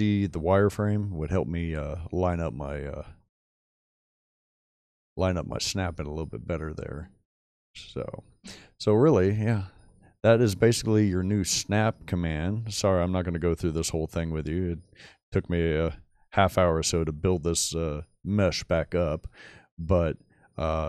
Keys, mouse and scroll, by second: 1.1 middle drag, 2.7-4.1 scroll up 2, 4.1 shift+middle click, 4.7 shift+middle click, 6.6 middle click, 11.1 shift+middle click, 12.0-12.8 scroll down 2, 15.6-15.9 middle drag, 16.2-16.9 middle drag, 19.3-19.6 middle drag, 19.9-20.7 middle drag.